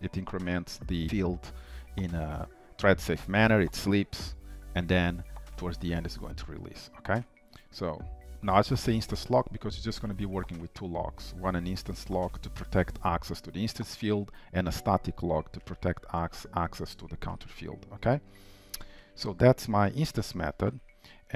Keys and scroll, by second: 20.4 ctrl+w.